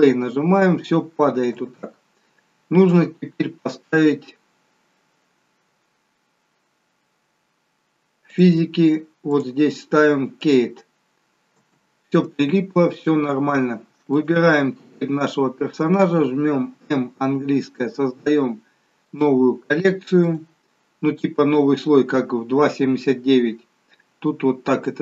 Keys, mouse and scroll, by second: 2.8 scroll up 1, 4.6 scroll up 6, 6.6-7.1 scroll down 2, 8.2 scroll down 1, 8.5 click, 11.7 space, 13.5 scroll up 2, 14.3 click, 16.8 m.